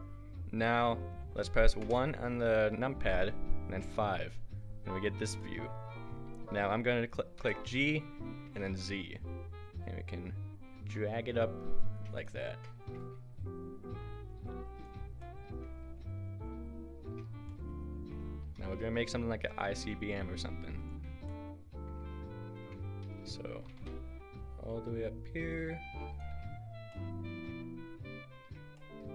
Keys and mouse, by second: 1.8 KP_1, 3.8 KP_5, 7.4 g, 12.9 g, 18.5 g, 23.7 g.